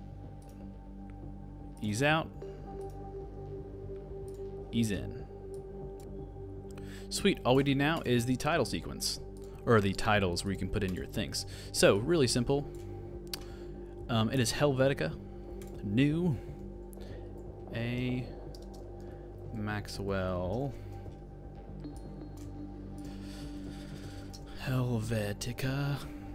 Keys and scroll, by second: 17.3 shift+a, 18.7-20.8 typing, 24.0 shift+h, 24.3 shift+e.